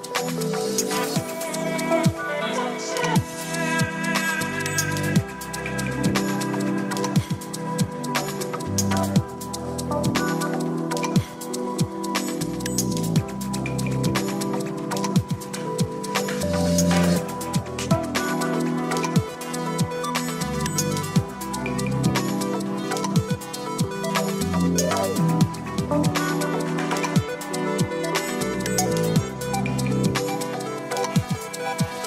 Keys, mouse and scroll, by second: 0.3-1.3 drag, 2.2 click, 3.9 click, 8.5-9.9 drag, 11.2 click, 12.9-13.9 drag, 16.7 click, 20.5 click, 24.2 click, 25.7-27.1 drag, 28.4 click, 30.2 click.